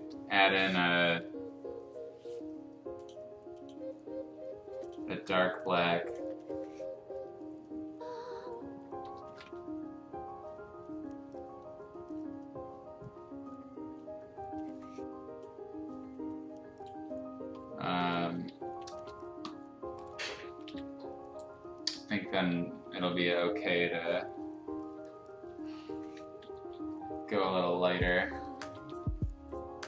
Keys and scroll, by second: 9.2 ctrl+a, 18.5 ctrl+a, 20.6 ctrl+i, 21.9 b, 22.6 [, 22.8 [, 23.0 [, 24.8 [, 26.2-28.8 typing.